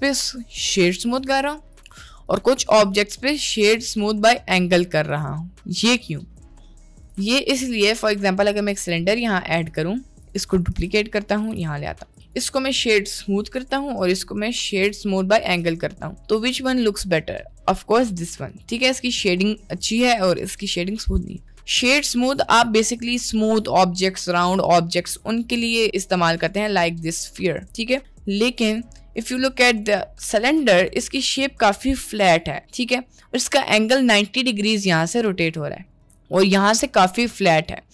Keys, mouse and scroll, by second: 1.0 click, 2.2-4.4 right drag, 4.4 click, 6.1 middle drag, 6.7 middle drag, 7.2 shift+a, 8.8 g, 9.6 g, 10.8 shift+d, 11.5 g, 12.7 right click, 13.0 click, 14.0 click, 14.6-15.5 drag, 16.2-17.4 middle drag, 17.7 click, 28.5 middle drag, 29.1-29.5 middle drag, 29.9 drag, 30.7 middle click, 32.5-33.1 middle drag, 33.9 middle click.